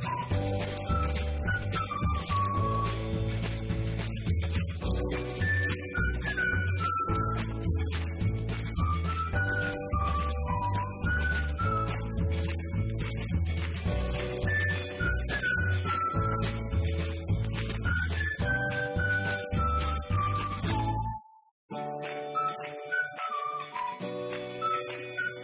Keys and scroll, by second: 5.3 ctrl+c, 7.7 ctrl+v, 9.2 ctrl+v, 11.2 ctrl+shift+Left, 13.1 ctrl+v.